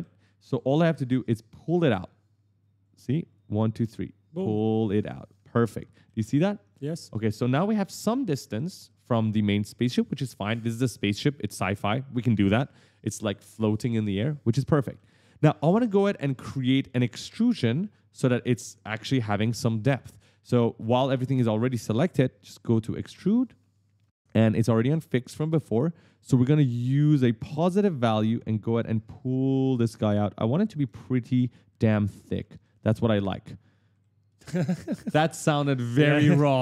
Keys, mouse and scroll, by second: 0.4 right click, 0.7 right click, 3.2 click, 4.9-6.3 typing, 5.1 right click, 5.3 right click, 5.7 right click, 5.9 right click, 6.5 right click, 6.7 right click, 7.7 right click, 8.3 right click, 13.8 right click, 13.8 right click, 14.3 right click, 14.5 right click, 14.7 right click, 22.8 click, 23.6-25.2 typing, 23.9 right click, 24.3 right click, 24.7 right click, 26.4 click, 30.7 right click, 30.7 right click, 31.1 right click, 31.2 right click, 31.4 right click, 31.7 right click, 31.9 right click, 32.1 right click, 32.4 right click, 32.5 right click, 33.6 right click, 33.7 right click, 36.4 right click, 36.4 right click.